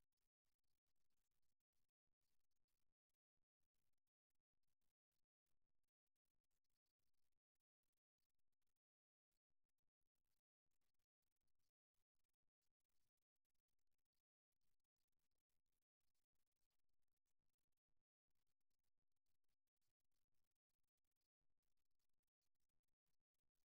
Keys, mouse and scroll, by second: 1.0-2.8 right drag, 3.2 middle click, 3.9-8.0 middle drag, 10.7-14.4 right drag, 14.2 f, 15.2-16.8 middle drag, 17.0 middle click, 17.8 middle click, 18.3 middle click, 21.3 right click, 21.8-23.2 middle drag, 23.4 middle click.